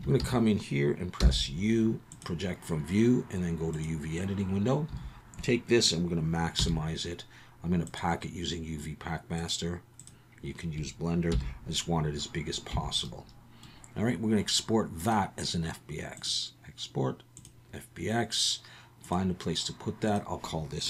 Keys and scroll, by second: 0.2 a, 1.2 u.